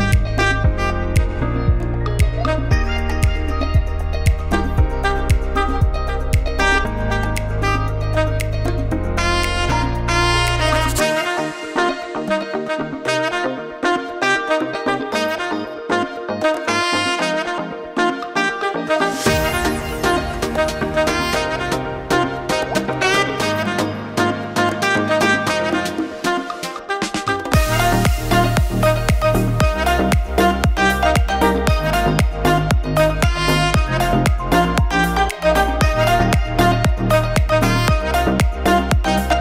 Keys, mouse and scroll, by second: 0.8 KP_1, 1.2 scroll down 2, 1.4 shift+middle click, 2.1 shift+middle click, 2.2 scroll up 2, 2.4 shift+middle click, 3.4 alt+shift+click, 6.5 scroll down 3, 6.7 shift+middle click, 7.0-8.0 scroll up 4, 7.2 shift+middle click, 7.7 middle click, 9.7 alt+shift+click, 10.1 middle click, 12.8 scroll down 3, 13.1 shift+middle click, 13.5 middle click, 13.9-14.6 scroll down 2, 14.2 middle click, 16.8 KP_1, 17.3 scroll down 1, 17.5 shift+middle click, 18.2 x, 20.6 alt+z, 21.7 middle click, 23.0 Tab, 23.1 middle click, 24.1 alt+a, 24.2-24.5 scroll down 3, 24.5 shift+middle click, 24.8 middle click, 29.9 shift+middle click, 30.4 click, 30.6 middle click, 31.5 click, 36.8 click, 38.2 click.